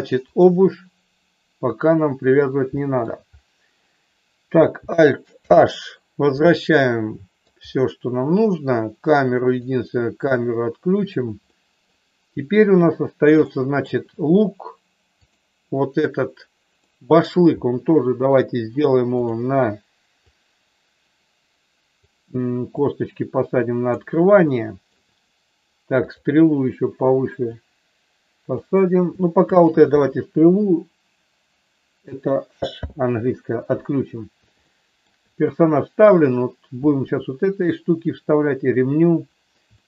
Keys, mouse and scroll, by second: 0.2 click, 2.7 shift+middle click, 5.3 alt+h, 6.7 middle click, 9.5 click, 11.5 middle click, 13.5 shift+middle click, 16.9 middle click, 19.2 click, 20.4-22.0 drag, 22.7-23.9 drag, 24.4 shift+middle click, 27.5-28.5 drag, 32.7 h, 34.6 shift+middle click, 39.7 shift+middle click.